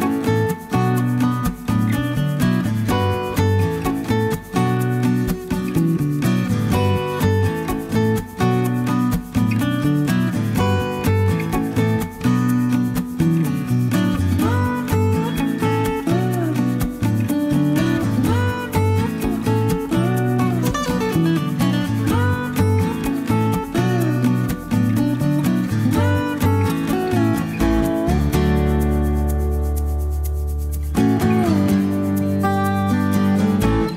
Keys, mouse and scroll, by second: 0.6 click, 4.4 click, 6.8 click, 7.3-11.1 drag, 11.1 scroll up 1, 11.3-13.6 middle drag, 14.1 0, 18.5 click, 19.2 click, 21.7 click, 22.8 click, 23.9 click, 26.0 click, 27.3 click, 28.3 click, 33.5 click.